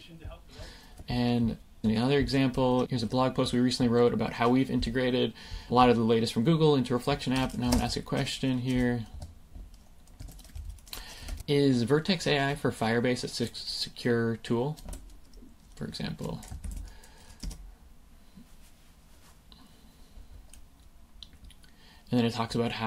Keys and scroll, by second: 7.6 super+space, 9.1 Escape, 10.2 BackSpace, 11.4 k, 15.2 super+v, 16.6 super+Left, 17.4 Return.